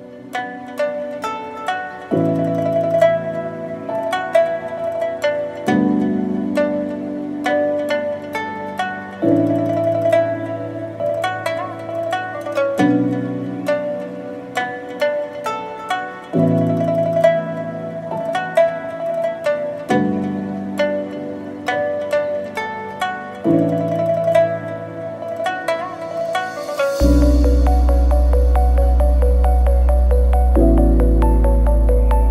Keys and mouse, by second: 1.1 z, 2.2-3.8 drag, 4.2 shift+click, 5.4 shift+click, 6.1 click, 7.5 KP_Decimal, 7.8 ctrl+s, 8.2-8.5 drag, 9.0 shift+drag, 10.4-12.8 drag, 13.0 shift+s, 15.7 click, 16.6 KP_1, 17.6 KP_1, 19.7 click, 21.4 click, 23.7-25.1 drag, 25.1 e, 26.5 s, 29.4 click, 31.0 click, 32.1-32.3 drag.